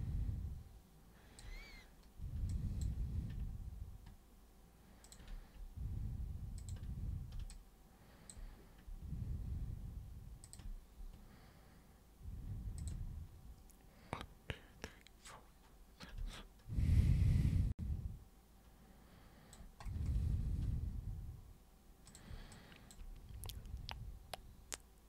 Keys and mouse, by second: 2.5 alt+super+click, 5.1 ctrl+super+click, 6.6 ctrl+super+click, 7.5 alt+super+click, 10.5 ctrl+super+click, 12.8 ctrl+super+click, 16.3-19.5 alt+super+drag, 22.1 super+click, 22.5 alt+super+click.